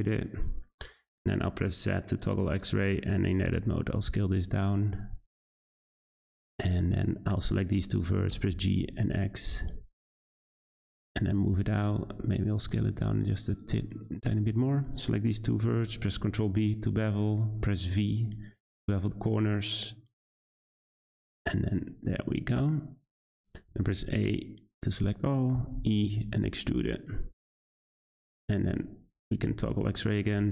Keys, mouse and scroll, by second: 1.4 z, 2.7 Tab, 3.6 s, 6.5 click, 7.5-8.3 scroll up 2, 8.3 g, 11.9 s, 14.0 click, 16.2 b, 21.8-23.7 middle drag, 23.7 a, 25.5 e, 27.6 Tab, 28.7 z, 28.8 z, 30.1 g.